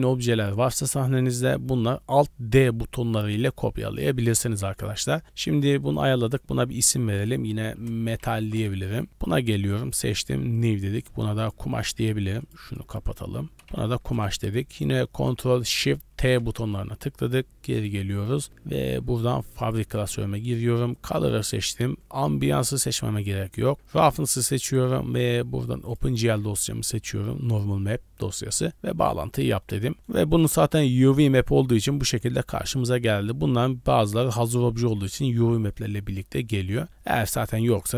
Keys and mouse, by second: 4.0 drag, 4.7 click, 5.3 click, 5.8 click, 6.8 click, 7.1-8.6 drag, 9.6 click, 10.5 click, 10.9 click, 11.6 click, 12.7 click, 13.1-14.1 drag, 15.2 click, 16.3 ctrl+shift+t, 29.6 middle drag, 29.9 middle click, 30.5-31.2 middle drag, 31.6 shift+middle drag, 34.6 drag, 35.7-37.5 middle drag.